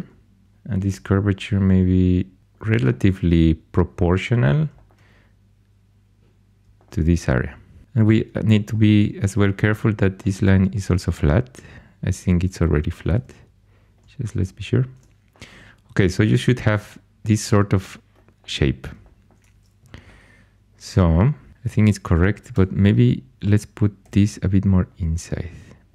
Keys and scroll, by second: 0.0-1.3 typing, 13.1 g, 19.7 2, 22.5 1, 24.0 g.